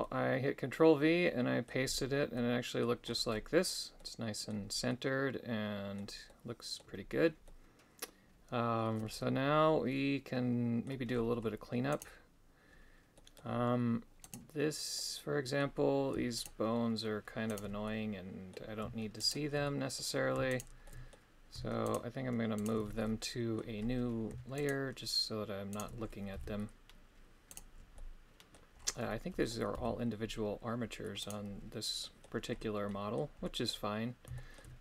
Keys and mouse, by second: 0.0-1.6 middle drag, 2.3 middle click, 3.9 middle click, 4.8-6.0 middle drag, 6.2 middle click, 7.4-10.9 middle drag, 11.9 right click, 13.1 middle click, 14.2 right click, 14.9 middle click, 16.4 shift+right click, 17.4 shift+right click, 17.8 middle click, 19.2 shift+right click, 19.6 middle click, 20.5 shift+right click, 20.8 shift+middle click, 21.8 shift+right click, 22.9 middle click, 24.6 shift+right click, 25.7 shift+right click, 26.3 g, 27.5 right click, 27.9 middle click, 29.1 middle click, 29.7 g, 31.2 right click, 32.0 middle click, 32.8 middle click, 33.4 middle click, 34.3 shift+middle click.